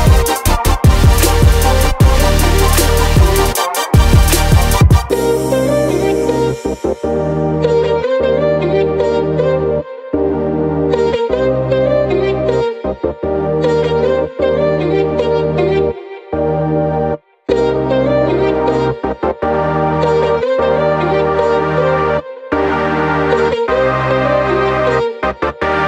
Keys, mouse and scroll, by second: 0.5 click, 2.4-3.0 drag, 3.6 click, 4.2-4.7 scroll up 2, 4.9-5.4 scroll up 2, 5.7 scroll up 1, 7.4-8.7 drag, 9.6-10.9 scroll down 3, 11.7-14.5 drag, 15.2 drag, 22.4-25.3 drag.